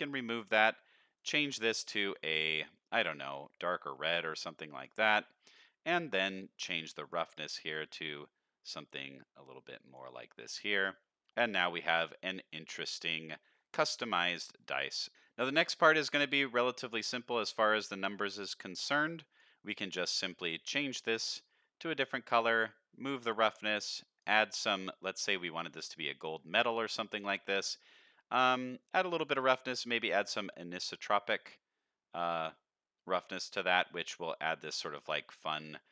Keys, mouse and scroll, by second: 0.0 scroll up 2, 1.1 click, 5.1 middle click, 5.6-6.1 scroll up 3, 6.1 middle click, 7.0 click, 8.0-10.1 drag, 10.4 alt+a, 10.6 middle click, 11.0 scroll up 1, 11.3 middle click, 12.3 middle click, 12.7 scroll down 2, 13.0-13.5 middle drag, 13.7 scroll up 1, 14.4 middle click, 15.1 click, 15.4 middle click, 15.9-16.6 scroll down 3, 16.6 middle click, 17.2 click, 17.7 middle click, 18.1-18.6 scroll up 1, 18.6 drag, 18.6 scroll up 1, 19.2 click, 19.8 click, 22.5 click, 23.7 click, 24.6 middle drag, 25.0 scroll up 1, 25.5 shift+middle drag, 25.8 middle click, 26.3 middle click, 26.3 scroll up 1, 26.6 shift+middle click, 28.7 shift+click, 29.6 click, 34.0 middle drag, 35.0-35.3 middle drag.